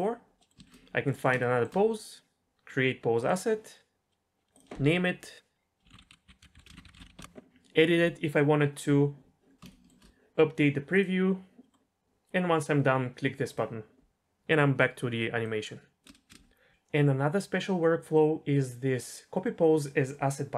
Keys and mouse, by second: 0.4 middle click, 3.2 click, 4.6-7.2 drag, 13.5 drag, 15.4-16.0 drag, 16.1 space, 16.6 space.